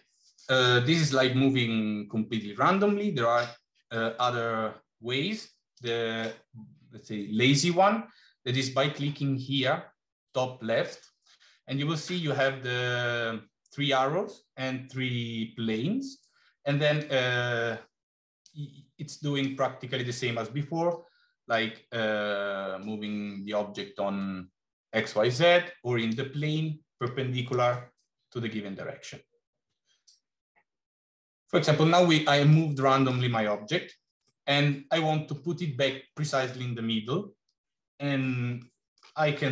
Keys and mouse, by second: 5.6 click, 16.9-18.3 drag, 19.3-20.9 drag, 21.3-22.8 drag, 26.1-30.1 drag, 32.6 middle click, 34.3-34.9 middle drag, 38.5 middle click.